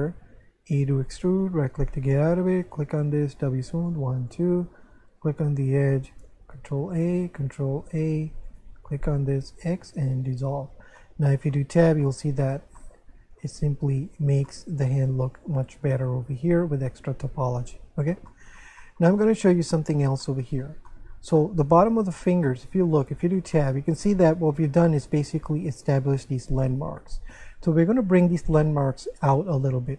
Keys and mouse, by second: 0.8 e, 1.1 right click, 2.6 alt+right click, 3.3 w, 3.7 click, 4.0 w, 4.2 click, 5.9 right click, 6.5 ctrl+a, 7.0 right click, 7.3 ctrl+a, 8.5 right click, 8.6 shift+right click, 9.7 x, 10.2 click, 11.0 middle click, 11.6 Tab, 12.0 middle click, 14.5 middle click, 15.9 Tab, 18.3 middle click, 21.4 shift+middle click, 22.4 middle click, 23.1 Tab, 23.5 shift+middle click, 28.6 shift+middle click.